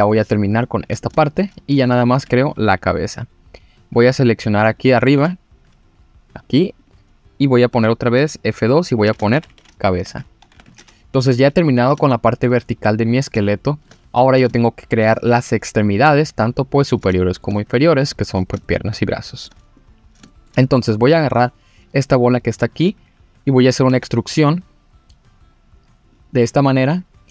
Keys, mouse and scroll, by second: 0.2 scroll down 2, 1.1 scroll down 1, 1.2 shift+middle click, 1.5 scroll up 2, 2.2 click, 4.8 click, 5.0 e, 5.1 z, 6.4 click, 6.8 click, 7.7 F2, 11.5 scroll down 2, 12.0 shift+middle click, 13.4 shift+middle click, 14.2 scroll up 1, 14.5 shift+middle click, 16.7-17.0 scroll down 2, 17.2 shift+middle click, 18.6 shift+middle click, 19.8-20.2 scroll up 2, 20.3 shift+middle click, 20.9 click, 23.9 e, 26.1 click, 26.7 click.